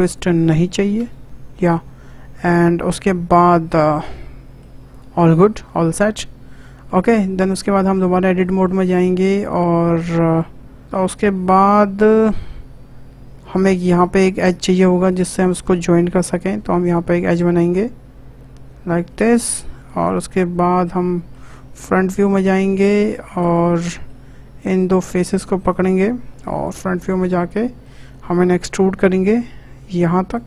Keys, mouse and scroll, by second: 1.2 KP_0, 2.3 click, 3.7-4.0 scroll down 2, 4.0 middle click, 4.9 click, 5.1 Tab, 5.4 scroll down 1, 5.7-6.3 shift+middle drag, 6.3-6.6 scroll up 1, 6.6-7.2 shift+middle drag, 7.2 Tab, 7.8 click, 8.1-9.5 middle drag, 9.5 shift+click, 10.0-14.3 shift+middle drag, 15.1-19.3 drag, 20.8 scroll up 1, 21.0-22.5 shift+middle drag, 22.5 click, 22.7 click, 23.4 click, 23.8 middle click, 24.6 click, 25.7 shift+click, 27.2-27.6 scroll up 2, 27.6-28.9 shift+middle drag, 28.9 e.